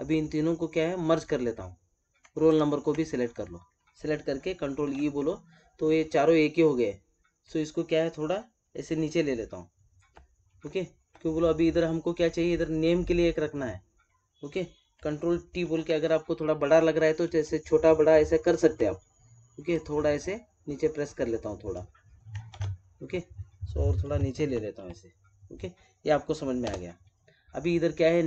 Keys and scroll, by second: 4.6 ctrl+e, 15.5 ctrl+t, 22.4 ctrl+z.